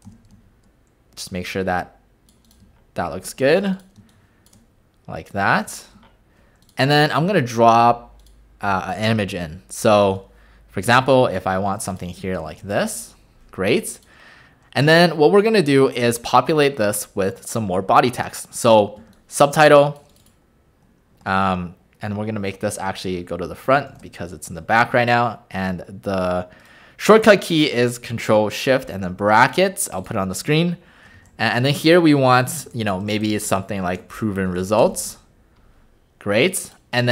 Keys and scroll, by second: 0.1 v, 4.0 space, 21.3 ctrl+a, 31.2 ctrl+a, 32.3-35.1 typing.